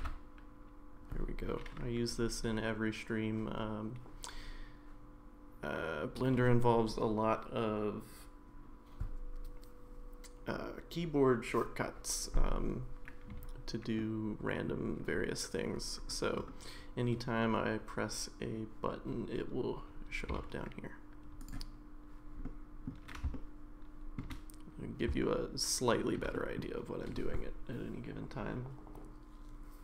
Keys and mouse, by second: 0.0 n, 14.0-14.7 middle drag, 20.5 a, 21.4 click, 22.4-22.9 middle drag, 23.4-24.2 shift+middle drag, 25.2-26.2 shift+middle drag, 26.3 middle drag.